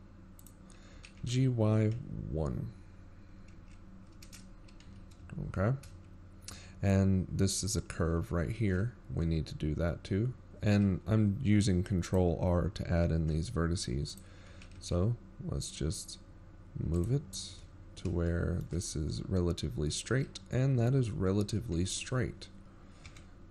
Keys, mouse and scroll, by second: 0.0-0.4 scroll up 2, 0.4 g, 7.6 z, 8.2-8.6 shift+scroll down 4, 11.5 ctrl+r, 15.9 g, 20.2-20.5 shift+scroll down 9, 20.6-21.1 scroll up 5, 21.2 shift+middle click, 21.9-22.7 scroll up 3.